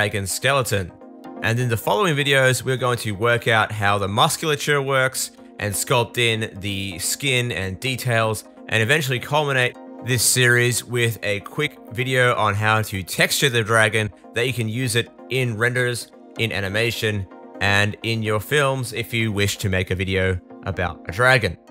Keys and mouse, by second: 1.8 r, 3.0 KP_1, 4.4 g, 9.6-11.4 middle drag, 11.4 click, 12.2-21.7 middle drag.